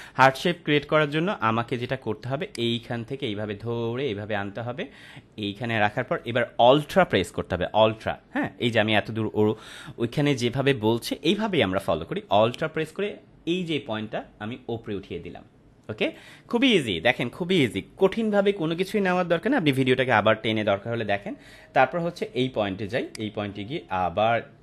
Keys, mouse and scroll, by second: 2.4-16.1 drag, 23.0-24.6 drag.